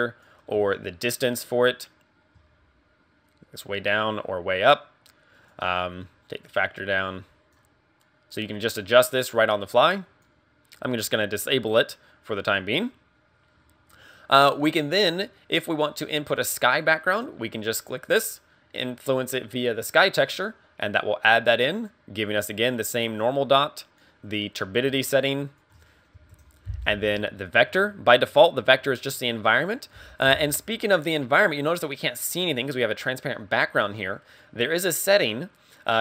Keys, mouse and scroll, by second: 0.8 shift+click, 6.1 click, 7.0 click, 8.0 click, 8.2 click, 12.3 click, 17.8 click, 21.9 click, 25.8 ctrl+click, 29.1 scroll down 5, 35.8 click.